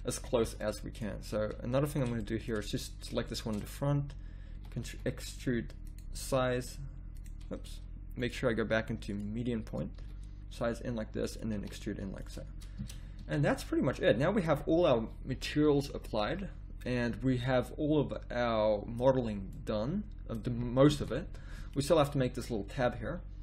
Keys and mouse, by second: 0.3 z, 0.4 z, 4.6 e, 6.4 s, 8.2 click, 10.0 s, 11.5 e, 12.8 Tab, 13.2 a, 21.0 KP_7, 21.3 z, 23.0 z.